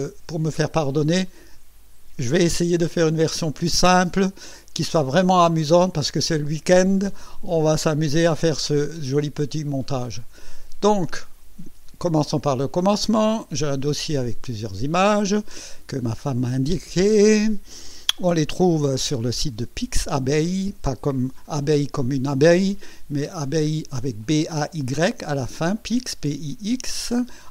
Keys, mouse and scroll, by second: 11.4 click.